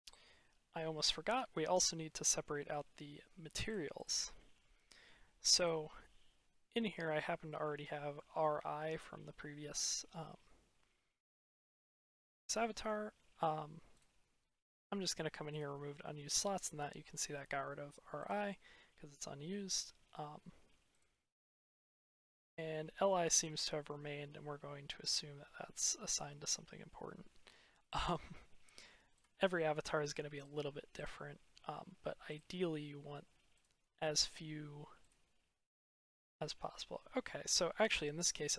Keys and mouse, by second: 0.8-1.2 middle drag, 1.6-2.6 middle drag, 3.5 click, 7.3-8.0 shift+middle drag, 12.3-13.8 drag, 14.6-15.5 drag, 21.0-21.9 drag, 27.8-28.5 drag, 29.0 click, 30.2 click, 32.1 click, 36.6-37.2 middle drag, 37.2-38.5 drag.